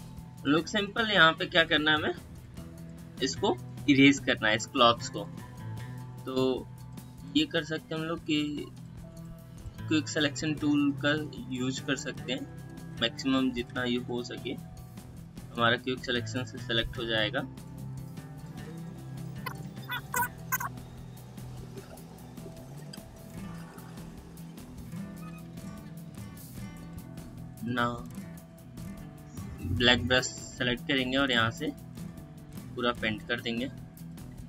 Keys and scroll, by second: 14.7 space, 18.7 space, 19.4 space.